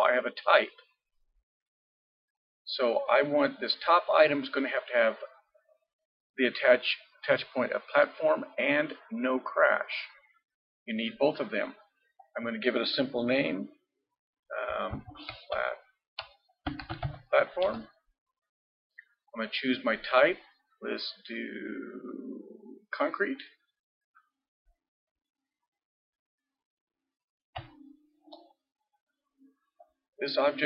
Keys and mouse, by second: 9.8-14.2 drag, 25.0-26.9 middle drag, 29.8-30.6 drag.